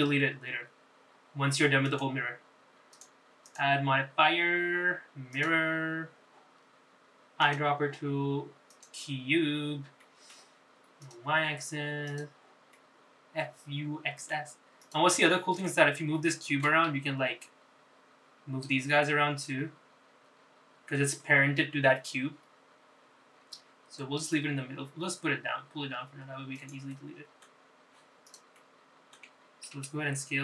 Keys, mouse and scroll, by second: 0.0 scroll up 2, 0.4 shift+middle click, 1.6 scroll down 2, 2.2-3.0 scroll up 3, 3.0 click, 4.1 click, 4.6-6.9 drag, 8.6 click, 10.8-11.1 scroll down 2, 11.2 shift+middle click, 12.2 click, 13.2 click, 13.9-15.4 middle drag, 16.0 click, 16.3 middle click, 17.2 scroll down 1, 17.4 shift+middle click, 18.0 g, 28.0 middle click, 28.9-29.4 scroll down 1, 29.4 click, 29.8 alt+middle click.